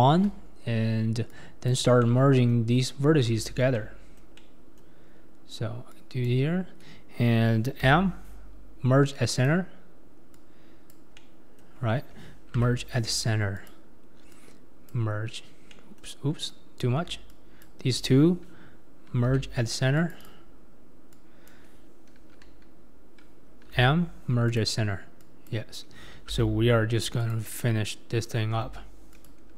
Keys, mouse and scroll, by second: 0.0 1, 0.6-1.3 scroll up 3, 1.3 click, 2.0 middle click, 2.7-3.3 scroll down 4, 3.3 alt+z, 3.7 alt+middle click, 4.4 middle click, 5.0-5.9 scroll up 2, 5.9 click, 7.9 m, 10.3 click, 11.2-12.6 middle drag, 12.6 m, 14.3 click, 15.7 middle click, 16.5 click, 17.3 shift+click, 19.3 m, 20.2 click, 21.1 click, 23.8 m, 25.2 click, 26.4 m, 27.9 click, 28.6 m.